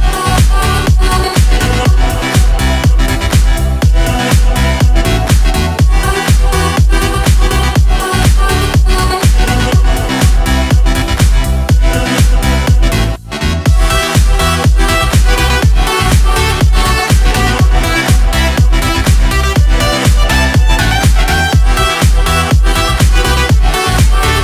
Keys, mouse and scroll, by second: 0.3 click, 1.4 scroll up 2, 2.6 click, 3.0-3.3 scroll up 2, 3.3 click, 4.5 click, 8.9 click, 9.6 click, 10.6 scroll down 1, 11.3 click, 12.9 click, 13.6-17.9 typing, 19.2 click, 20.4-21.5 typing, 22.8 click.